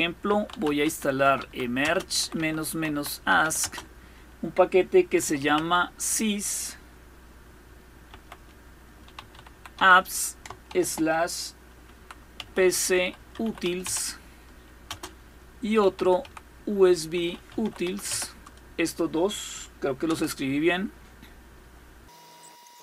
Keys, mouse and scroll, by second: 0.0-3.5 typing, 4.6-5.6 typing, 7.7-10.3 typing, 11.5-18.2 typing, 19.7 Return, 22.3 click, 22.5 scroll down 1.